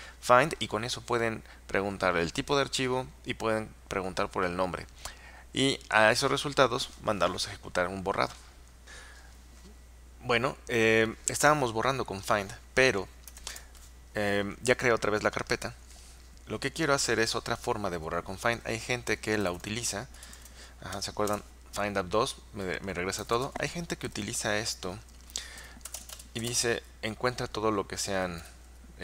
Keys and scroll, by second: 13.2-13.9 typing, 19.3-21.5 typing, 23.0-27.1 typing, 28.2-29.0 typing.